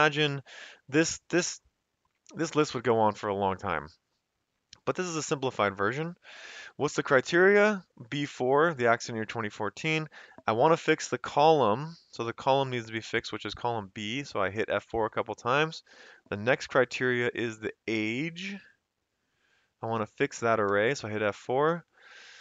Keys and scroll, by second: 6.9 Left, 13.6 F4, 13.8 F4, 14.3 F4, 15.6 ,, 20.9 F4, 21.7 ,.